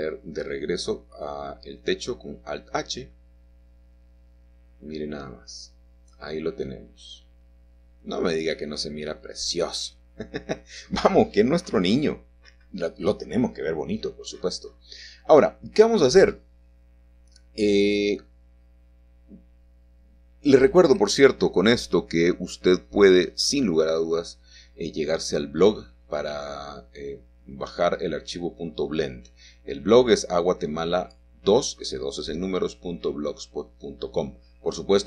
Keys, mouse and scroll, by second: 1.4 Tab, 3.4 alt+middle click, 3.4-4.5 alt+scroll down 1, 7.1 middle click, 7.4-8.4 scroll down 1, 12.2 middle click, 12.3 click, 13.6 h, 20.4 KP_Add, 23.0-23.9 scroll up 1, 23.5-25.2 shift+middle drag, 25.2 shift+click, 29.0-35.0 drag.